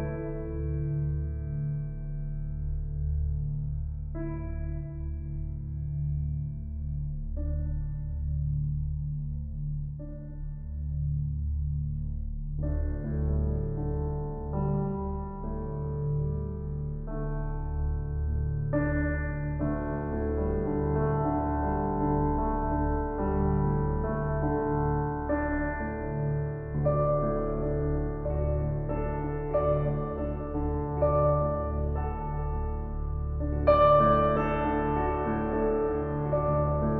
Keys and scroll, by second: 10.5 ], 29.0 ].